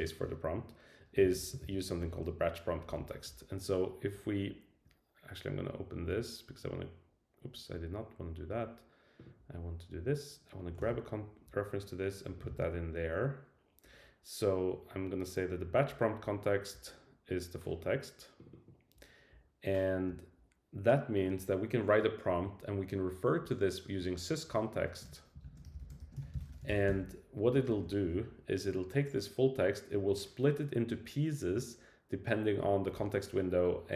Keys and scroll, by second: 2.0 Return, 2.4 Right, 10.8 super+c, 12.5 super+v.